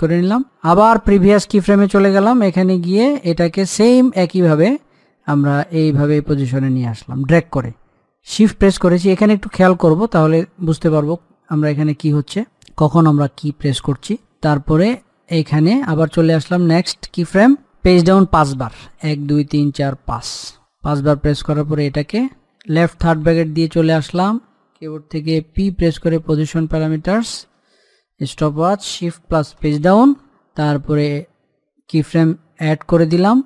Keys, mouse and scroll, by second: 0.8 click, 4.7-11.8 shift+drag, 12.8-15.4 drag, 19.2 Page_Down, 22.0 click, 23.4 l, 25.8 p, 26.6 scroll down 1, 27.5 click, 27.8 click, 29.8 Page_Down, 32.2 click.